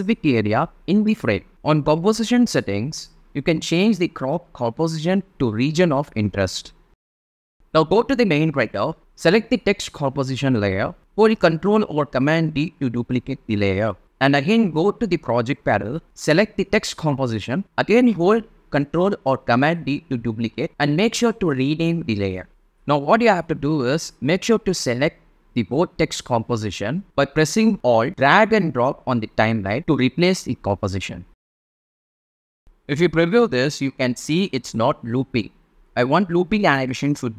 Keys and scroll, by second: 12.0 super+d, 16.8 super+d, 18.4 Return, 19.3 Right, 20.1 BackSpace, 20.9 2, 33.1 space, 35.2 space, 36.7 space.